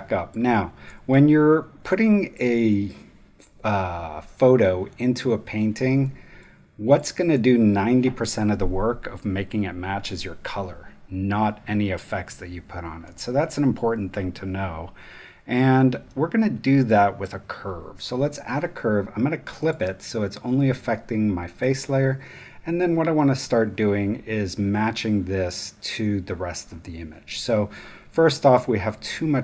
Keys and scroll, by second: 1.6 space, 5.9 space.